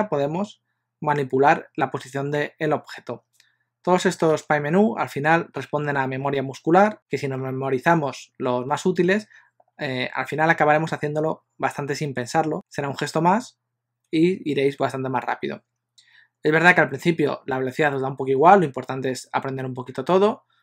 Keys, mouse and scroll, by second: 4.4 shift+s.